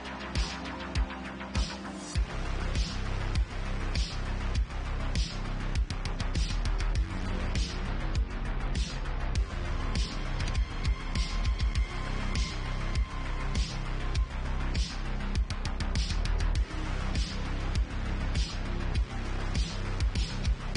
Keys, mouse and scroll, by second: 1.1 click, 1.2-1.7 shift+middle drag, 2.5 j, 3.0 click, 3.5 shift+click, 3.9 j, 4.5-5.1 middle drag, 5.5 click, 5.8 shift+click, 5.9-7.4 shift+middle drag, 6.1 1, 7.4 shift+click, 7.5-9.6 shift+middle drag, 7.8 1, 8.6 ctrl+z, 9.1 j, 9.6 click, 9.8 shift+middle click, 9.9 shift+click, 10.3 1, 12.8 j, 13.2 click, 13.8 g, 16.9 click, 18.2 m.